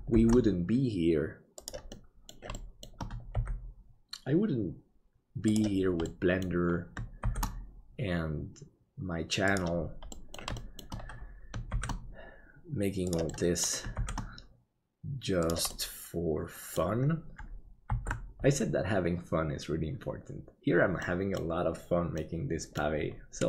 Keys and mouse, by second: 0.2 shift+d, 2.1 middle click, 2.6 middle click, 3.3 g, 6.2 middle click, 7.3 shift+d, 10.2 middle click, 10.7 shift+middle click, 11.8 shift+d, 13.4 middle click, 15.9 middle click, 18.3 ctrl+s, 21.1 middle click, 22.2 middle click.